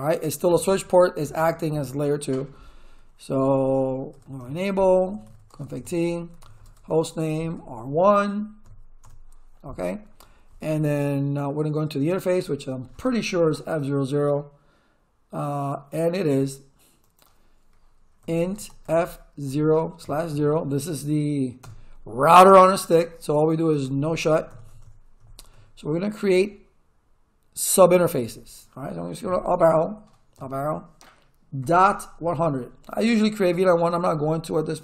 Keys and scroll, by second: 3.9-7.5 typing, 8.6 1, 9.0 Return, 18.0-20.3 typing, 21.6 Return, 23.3-24.8 typing, 29.2 Up, 31.6-32.9 typing.